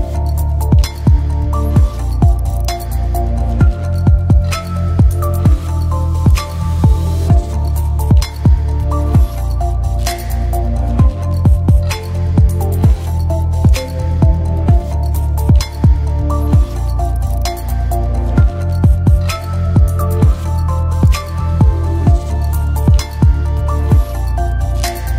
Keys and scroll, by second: 8.1 7, 8.6 Return, 23.6 ctrl+z.